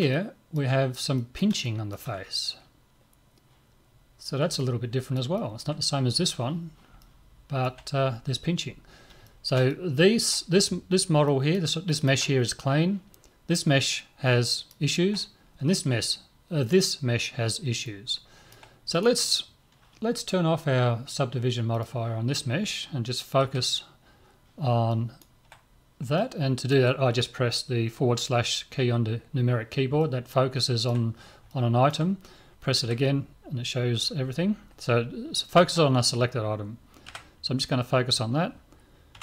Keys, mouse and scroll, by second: 4.1-4.6 scroll down 1, 4.6-13.7 middle drag, 14.5-16.3 middle drag, 17.9-19.0 middle drag, 19.0 right click, 21.8-24.2 drag, 23.4 KP_Divide, 24.9-27.9 middle drag, 30.0-33.2 middle drag, 32.9 KP_Divide, 35.4-37.4 middle drag, 37.1 KP_Divide, 39.1 Tab.